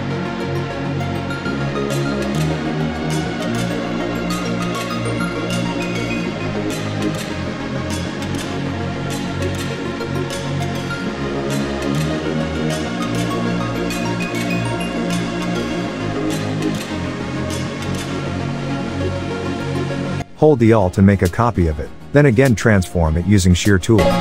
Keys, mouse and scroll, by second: 2.5 alt+scroll down 1, 2.8 click, 3.1-3.5 alt+scroll up 1, 3.5 click, 4.3 right click, 7.4 click, 9.2 click, 12.4 click, 13.7 click, 15.5 ctrl+shift+], 16.3 click, 16.8 alt+scroll down 1, 17.6 space, 17.8 click, 17.9 space, 18.3 alt+scroll up 1, 18.6 space, 18.7-19.0 click, 19.0 space, 19.3 click, 20.1-21.3 alt+drag, 21.7-22.8 alt+scroll down 2, 23.9 click.